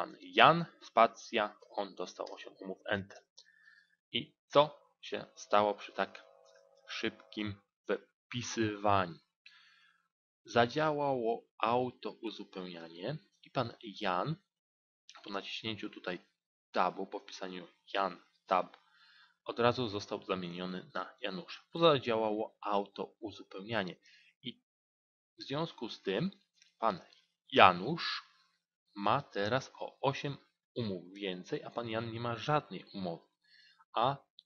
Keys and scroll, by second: 15.1 Tab.